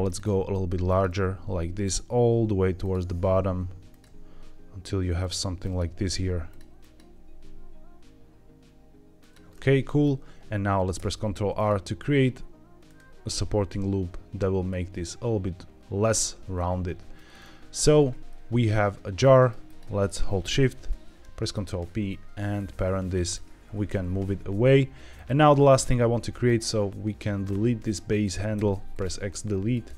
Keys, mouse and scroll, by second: 0.0 click, 0.2 e, 0.8 click, 1.0 e, 1.7 click, 1.8 e, 2.7 click, 2.9 e, 3.8 click, 3.9 e, 5.1 click, 5.5 click, 5.8 g, 6.4 click, 6.7 click, 6.9 g, 9.1 click, 9.4 middle click, 10.9 ctrl+r, 12.8-14.0 right drag, 16.5 middle click, 16.5 scroll up 1, 17.2-17.6 scroll down 3, 17.6 Tab, 18.2-19.2 middle drag, 19.6 shift+click, 20.9 ctrl+p, 22.4-23.1 scroll down 2, 23.1 click, 23.5 g, 23.8 x, 25.0 click, 26.3 drag, 27.3-28.5 scroll up 2, 28.5 x, 29.6 click.